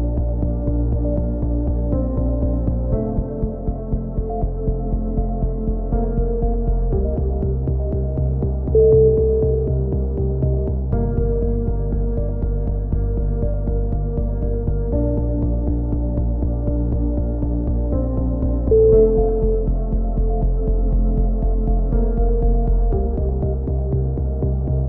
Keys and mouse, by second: 1.0-2.0 right drag, 1.8 e, 2.6-4.1 drag, 4.2 click, 7.8-10.3 drag, 10.7 x, 11.7 click, 12.5 KP_3, 12.8 z, 14.2 shift+d, 16.4 click, 19.0-20.2 middle drag, 20.2 click, 21.7 right click, 23.4 c.